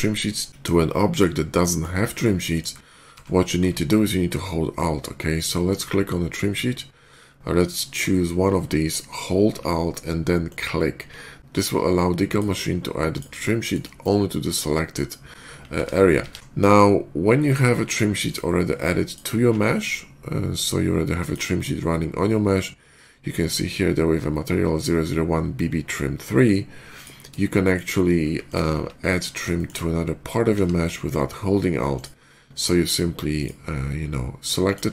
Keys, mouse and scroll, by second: 0.4 shift+middle click, 1.3 shift+middle click, 1.9 shift+middle click, 2.9 d, 5.5 click, 10.3 alt+click, 12.1 click, 13.0 click, 13.4 shift+middle click, 15.3 shift+middle click, 15.6 ctrl+z, 16.3 d, 18.1 click, 18.9 alt+click, 21.0 alt+click, 26.8 click, 27.3 shift+middle click, 28.3 alt+click, 29.4 shift+middle click, 30.4 d, 31.8 click, 33.2 click, 34.5 click.